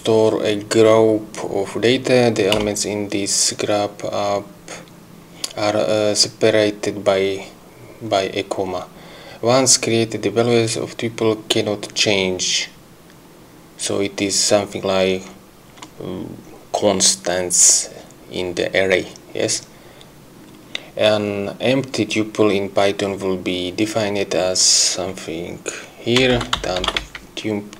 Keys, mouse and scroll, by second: 2.6 Return, 26.0-27.5 typing.